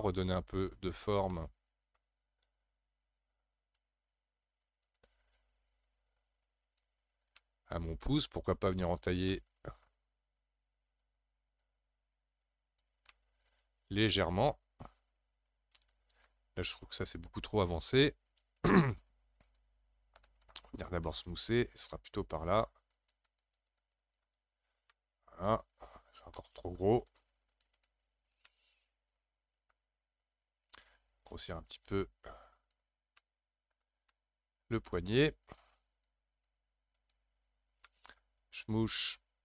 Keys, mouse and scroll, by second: 0.6 click, 1.1 scroll up 1, 1.3-3.3 middle drag, 3.3 f, 5.3-7.1 drag, 7.1 scroll down 2, 7.3-8.8 middle drag, 8.8 click, 9.3-11.0 middle drag, 11.0-13.1 drag, 13.1-16.1 middle drag, 19.4-24.9 drag, 24.9-27.1 middle drag, 27.1-28.2 shift+drag, 28.2 scroll down 3, 28.5-30.2 middle drag, 30.2-31.7 scroll up 2, 31.7-33.2 drag, 33.2-35.9 middle drag, 35.9-37.5 drag, 37.5-37.9 scroll down 1, 37.9-38.9 middle drag, 38.9-39.4 shift+drag.